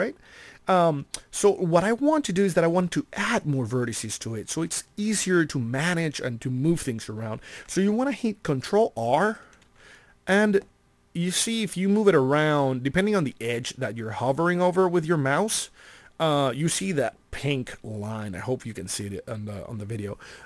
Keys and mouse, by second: 9.6 ctrl+r.